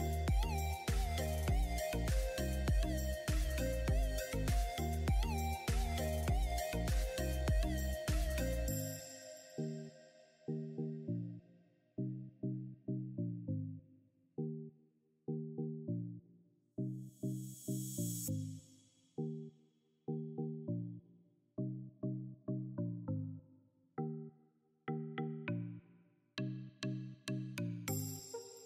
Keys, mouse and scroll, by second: 0.0 click, 3.6 click, 13.9 click, 19.6 click, 23.0-26.9 drag, 26.9-27.8 scroll up 1, 28.0-28.6 drag.